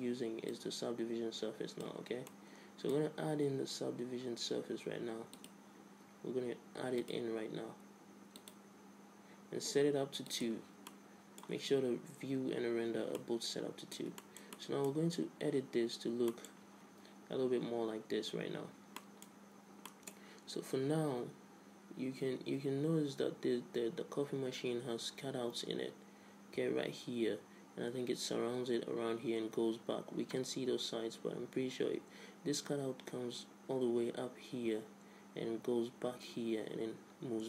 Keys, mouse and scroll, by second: 0.6-2.4 drag, 2.4-4.2 middle drag, 5.5-7.4 drag, 8.5-11.0 drag, 11.0 middle click, 11.3 click, 11.3 right click, 12.1 middle click, 13.3-18.4 middle drag, 19.1-21.8 middle drag.